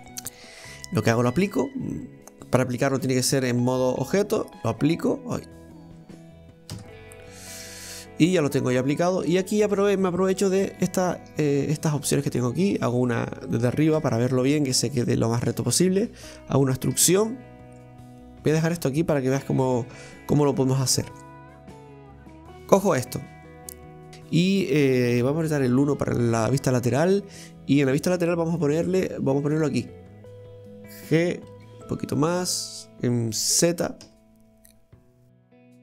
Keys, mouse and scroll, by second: 0.1-1.2 middle drag, 1.2-4.5 drag, 4.5 Tab, 7.7 click, 8.8 right click, 9.1 Tab, 9.5-10.7 middle drag, 10.7 right click, 11.4 shift+right click, 11.8-14.0 middle drag, 14.0 KP_7, 14.7-15.1 scroll down 1, 15.1-17.0 shift+middle drag, 17.0 e, 18.4-19.4 middle drag, 19.4-20.0 scroll up 2, 20.6-22.3 middle drag, 22.3 Tab, 22.6 right click, 23.3 Tab, 24.1-25.2 middle drag, 25.2 KP_1, 26.6 scroll up 1, 28.2 ctrl+r.